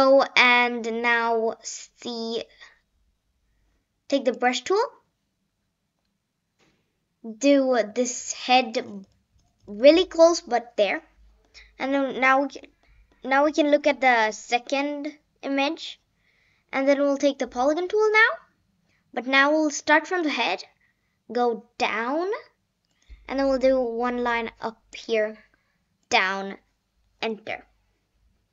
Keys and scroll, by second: 27.2 Return.